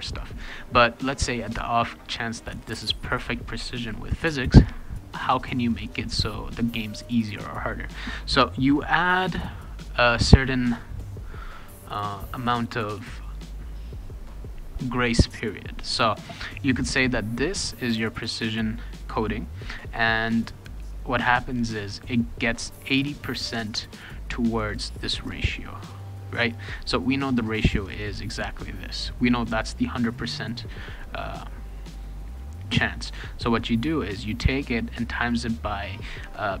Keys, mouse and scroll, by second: 18.3-19.7 drag, 21.8 click, 24.5 click, 24.7 click, 24.9 click, 25.7 click, 25.9 click, 27.0-28.3 drag.